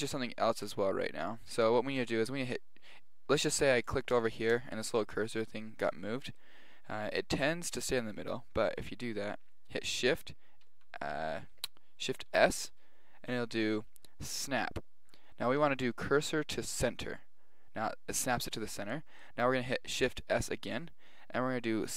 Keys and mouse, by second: 0.7 Tab, 3.6-6.5 drag, 10.7 shift+a, 12.3 shift+s, 20.4 shift+s.